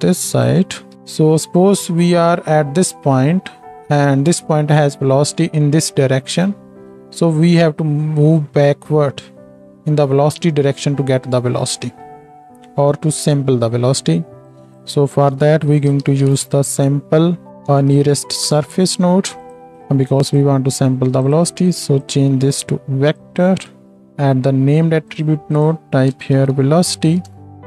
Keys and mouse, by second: 17.8 Down, 19.5 click, 25.1 click.